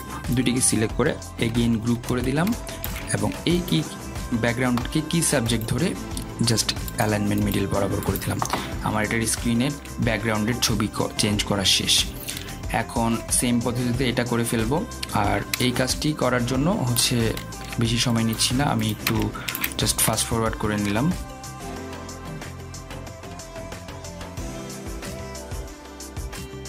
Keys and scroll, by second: 3.8 ctrl+g.